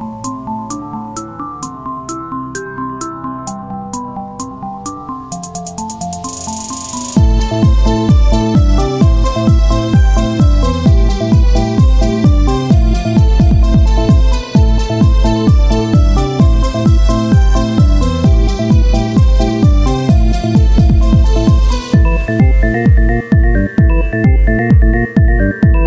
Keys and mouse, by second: 0.4 KP_3, 1.1-4.0 drag, 1.4 z, 1.9 c, 3.4 s, 5.6-8.1 drag, 5.9 c, 6.3 right click, 8.4-9.9 right drag, 8.8 c, 9.2-11.1 drag, 10.1 z, 11.1-12.1 middle drag, 12.5 KP_3, 13.3 Tab, 13.5 click, 13.6 Tab, 14.9 z, 16.9 i, 18.1 w, 19.4 Tab, 20.2 KP_1, 21.1 z, 25.1-25.8 middle drag.